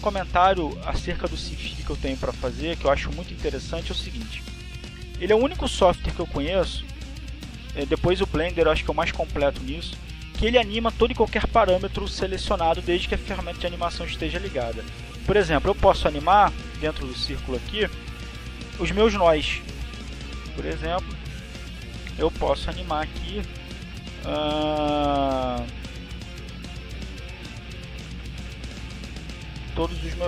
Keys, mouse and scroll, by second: 18.9 click, 20.8 click, 21.4 click, 24.1 click, 25.9 click, 28.1 click, 29.3 click.